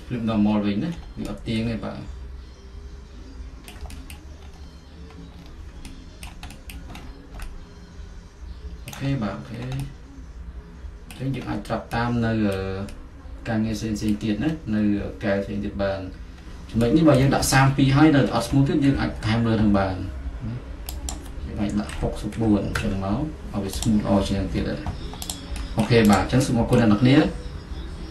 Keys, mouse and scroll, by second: 1.3 alt+middle click, 4.2-5.9 middle drag, 4.6-5.4 scroll, 5.5 scroll, 6.9 middle click, 6.9-7.5 scroll, 9.1 middle click, 11.5-13.0 middle drag, 14.5-17.6 middle drag, 17.6 F4, 18.5 middle click, 18.9 F4, 21.2 click, 22.1-22.4 typing, 22.8 Return, 23.9 click, 24.3-25.5 middle drag, 25.5-26.8 drag, 26.8-28.1 middle drag.